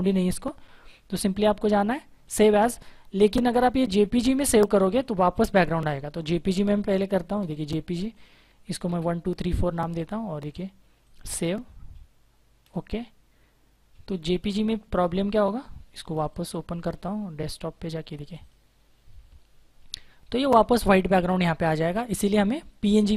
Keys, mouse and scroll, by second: 1.1 click, 4.4 click, 8.1-9.3 typing, 10.9 click, 15.6 click, 18.7 click.